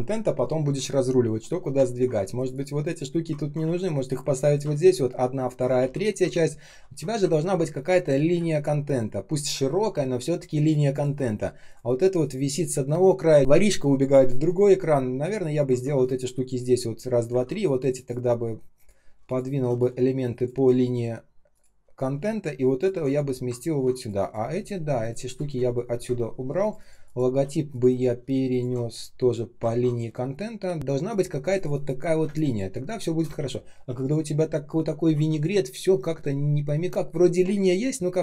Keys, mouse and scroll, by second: 1.8-2.3 ctrl+scroll up 1, 3.3 ctrl+scroll down 1, 3.5 r, 4.8 alt+click, 5.7 ctrl+d, 7.3-8.3 ctrl+scroll down 1, 8.3 space, 8.8 space, 8.8 space, 11.1 ctrl+scroll up 1, 17.2 ctrl+z, 19.2 shift+click, 24.9 shift+click, 25.2 shift+click, 25.9 Delete, 28.4 shift+click, 32.2 space, 32.7 space, 32.7 space, 33.3 ctrl+z.